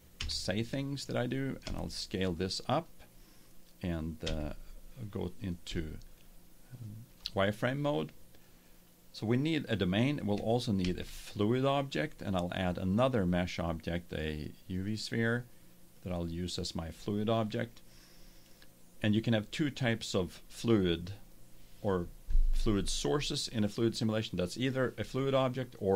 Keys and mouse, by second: 0.3 n, 1.6 s, 2.8-3.4 drag, 3.6 click, 4.2 z, 10.8 shift+a, 16.0-17.9 drag.